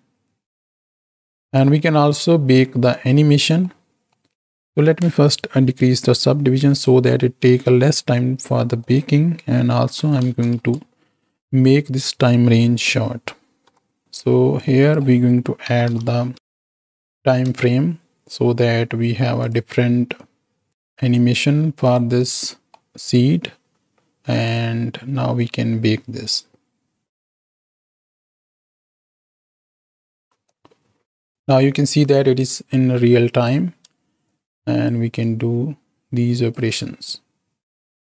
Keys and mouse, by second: 1.2 click, 1.9-2.4 middle drag, 3.7 middle click, 6.7 click, 8.7-10.6 drag, 13.6 Home, 14.6-19.4 drag, 20.4-21.1 drag, 21.7 click, 22.8-24.3 middle drag, 26.4 click, 30.4-33.4 drag, 34.3 shift+click, 35.3-36.5 shift+drag, 36.7 space.